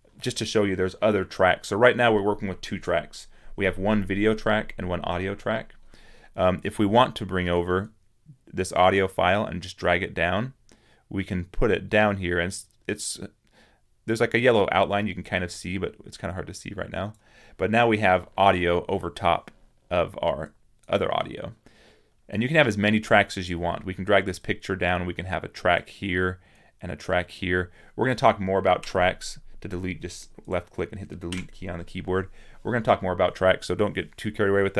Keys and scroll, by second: 28.6 Delete, 31.1 Delete.